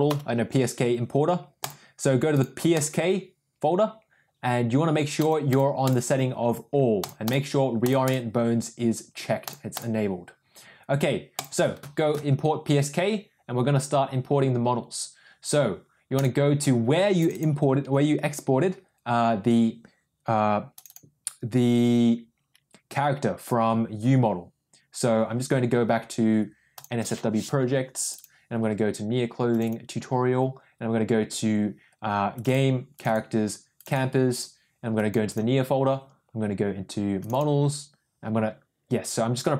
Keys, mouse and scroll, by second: 0.0 n, 1.5 click, 2.3 drag, 5.1 click, 5.4 click, 5.8 click, 6.9 click, 7.7 click, 9.3 click.